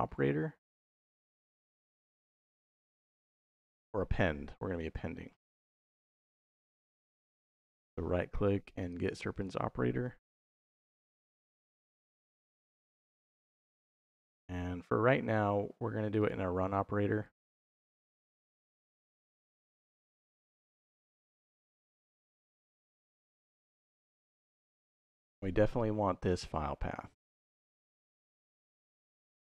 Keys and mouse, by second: 9.2 click, 10.3 shift+v, 17.1 click, 17.6 middle click, 18.7-20.3 drag, 21.0 middle click, 21.9 middle click, 24.1 click, 25.6-26.9 drag.